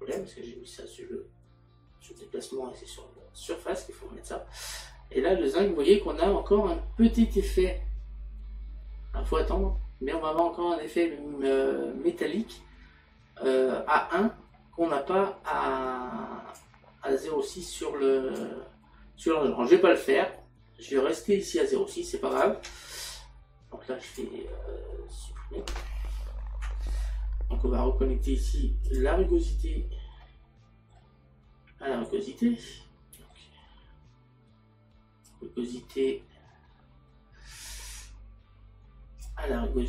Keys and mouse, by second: 2.2 click, 15.6 click, 17.7 click, 22.4 click, 22.7 Tab, 24.2 click, 28.9 click, 30.3 middle click, 32.0 middle click, 35.4 click.